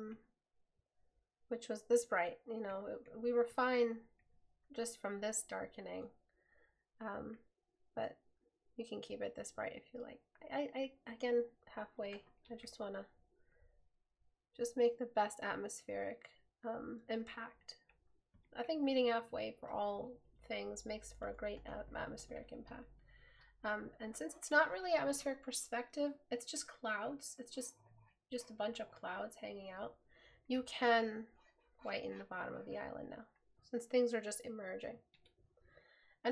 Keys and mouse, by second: 20.4 right click.